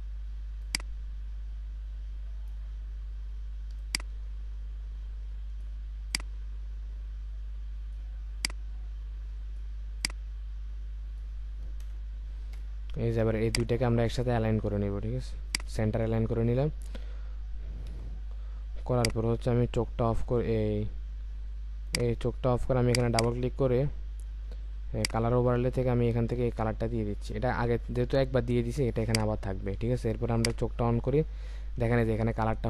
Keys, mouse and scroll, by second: 11.8 Return, 13.5 ctrl+click, 17.9 Up, 23.1 double click, 31.9-32.4 alt+scroll up 1, 32.4-32.6 alt+scroll down 1.